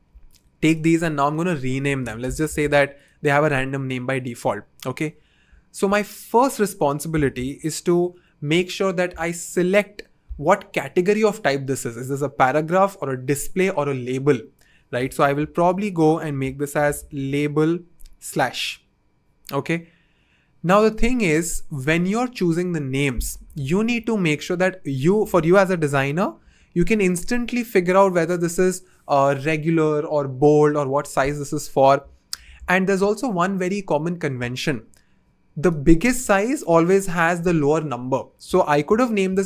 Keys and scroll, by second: 1.8 super+r, 2.2-2.6 typing, 15.5 super+r, 16.4-19.2 typing, 18.5 Return.